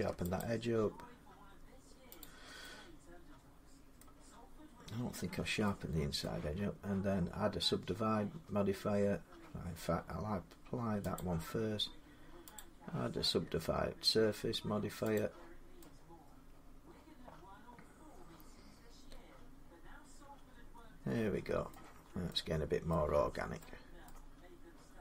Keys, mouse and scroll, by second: 0.2 click, 2.0 click, 3.8 middle click, 5.1 Tab, 6.0 middle click, 11.0 click, 12.4 click, 15.0 click, 18.4-20.0 drag, 21.5 middle click, 21.7 Tab, 22.7 middle click, 23.9 middle click.